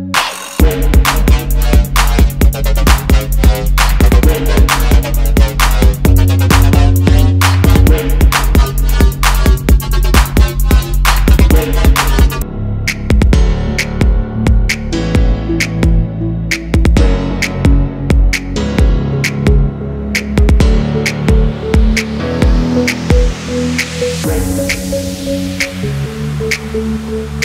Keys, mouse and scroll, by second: 0.5 alt+scroll down 1, 1.1 double click, 2.7 alt+scroll up 1, 3.3 alt+scroll down 1, 4.1 alt+scroll up 1, 8.0 alt+scroll down 1, 8.6 i, 9.7 ctrl+g, 10.2 alt+scroll up 1, 11.3 y, 12.5 alt+scroll down 1, 13.3 ctrl+g, 13.8 i, 14.8 double click, 15.2 alt+scroll down 1, 15.7 space, 16.4 alt+scroll up 1, 17.3 alt+scroll down 1, 17.7 double click, 19.5 ctrl+c, 19.5 ctrl+f, 20.7 double click, 22.0 alt+scroll up 1, 24.5 alt+scroll up 1, 26.5 double click.